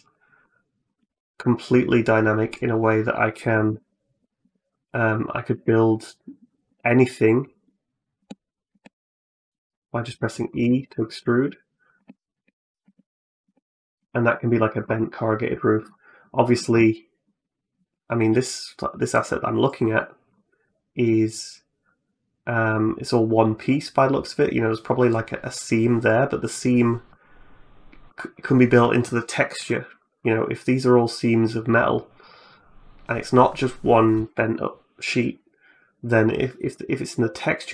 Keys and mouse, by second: 0.2 middle click, 0.8 g, 3.6 ctrl+z, 4.3 Tab, 5.3 Tab, 6.5 e, 7.4 e, 8.5 e, 9.3 middle click, 9.8 shift+middle click, 10.3 click, 10.4 middle click, 10.6 shift+click, 10.9 click, 11.2-14.7 typing, 16.6 click, 16.9 middle click.